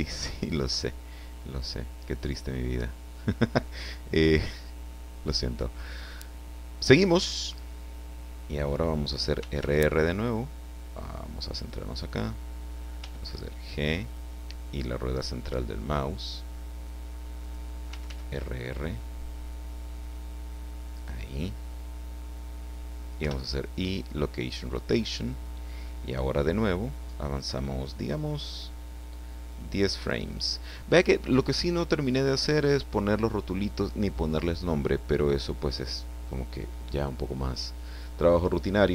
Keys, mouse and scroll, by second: 2.0 click, 9.3 r, 11.5 click, 12.9 g, 13.2 click, 17.4 click, 17.9 r, 20.9 click, 23.2 i, 23.9 click, 29.5 click.